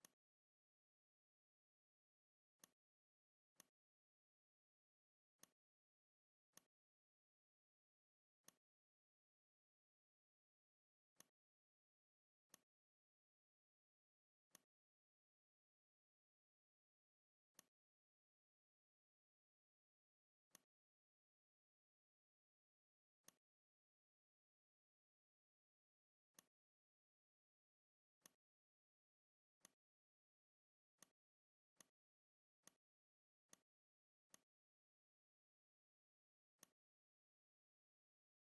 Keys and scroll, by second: 0.8 v, 29.3 space, 36.0 m.